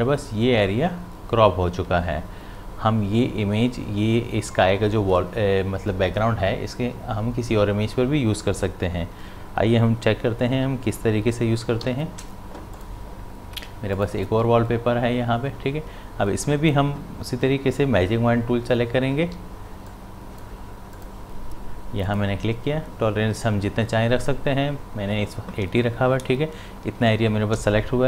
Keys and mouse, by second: 11.8 v, 12.8 click, 19.2 w, 19.9 click.